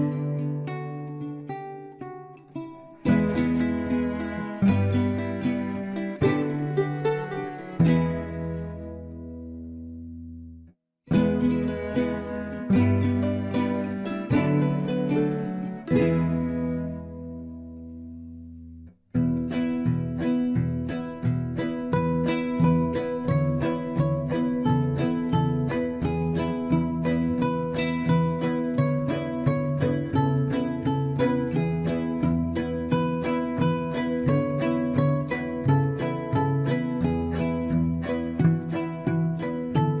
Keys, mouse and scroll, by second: 0.1 shift+z, 0.4-0.7 scroll up 4, 0.7-2.0 middle drag, 2.0 scroll up 1, 2.3 s, 3.4 ctrl+z, 3.7 Tab, 4.0 scroll up 1, 4.1 middle click, 4.9 s, 6.6 e, 7.4-8.2 scroll down 8, 7.6 Tab, 8.2-10.1 middle drag, 10.1 Tab, 10.4 middle click, 11.0 alt+shift+click, 11.4 KP_1, 11.9 shift+middle click, 12.3-13.2 scroll up 3, 12.4 shift+middle click, 13.2 s, 14.0 ctrl+z, 14.4 click, 14.9 alt+shift+click, 15.4 alt+click, 16.0 s, 17.9 e, 20.6 e, 24.3 middle click, 24.9 w, 26.3 e, 27.1 ctrl+z, 27.7-29.5 drag, 30.2 right click, 30.6-32.0 drag, 33.4 click, 34.4 alt+shift+click, 35.1 e, 37.9 click, 38.2 scroll down 1, 38.4 click, 38.8-40.0 middle drag.